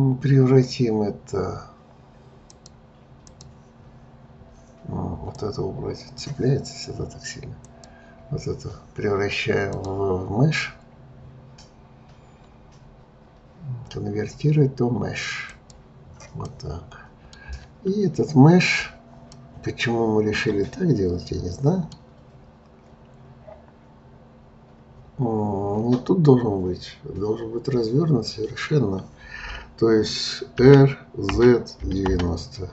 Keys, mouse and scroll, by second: 2.4-7.8 drag, 9.7-12.8 drag, 16.4-22.3 middle drag, 30.6 r.